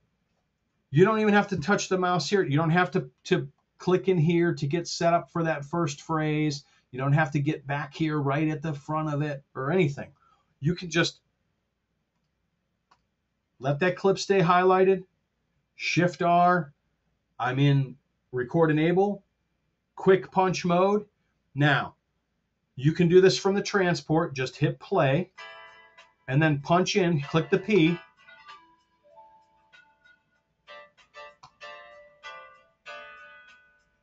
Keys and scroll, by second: 15.7 shift+r.